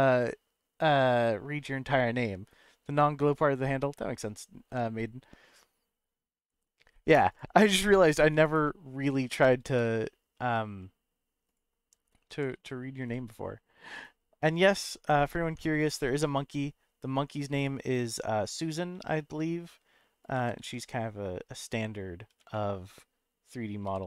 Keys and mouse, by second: 8.4 shift+right click, 9.6 shift+a, 12.3 g, 12.5 z, 13.0 s, 14.0 right click, 14.9 Tab, 15.4 Tab, 15.9 s, 16.4 z, 18.4 right click, 18.9 s, 20.2 right click, 20.3 g, 20.6 z, 21.6 click, 22.7 middle click, 23.8 g.